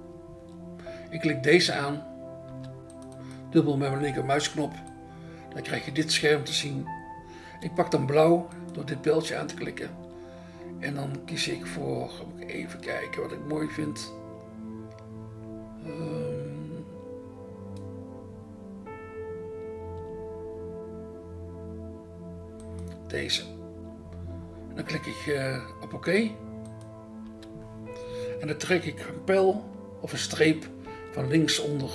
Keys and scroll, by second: 2.5 BackSpace, 27.3 BackSpace, 30.9 BackSpace.